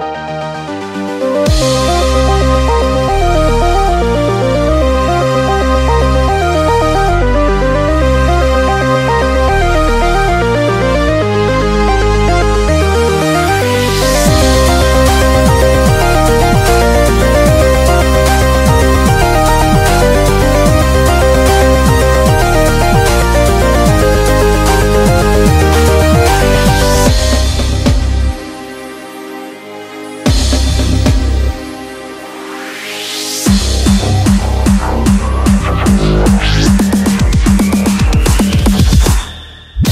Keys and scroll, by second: 0.5-3.1 typing, 4.2 typing, 5.6-7.7 typing, 8.9 typing, 12.5 typing, 15.5 super+-, 15.7 super+-, 20.7-22.4 typing, 23.7 typing, 27.4-30.8 typing, 35.0-39.9 typing.